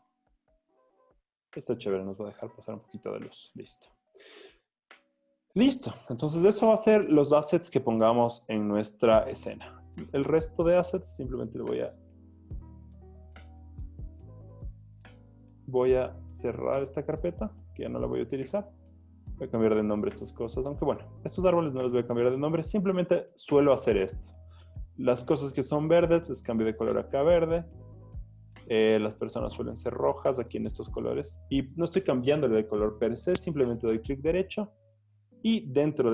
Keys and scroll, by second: 2.6 z, 3.8 v, 20.4 Escape.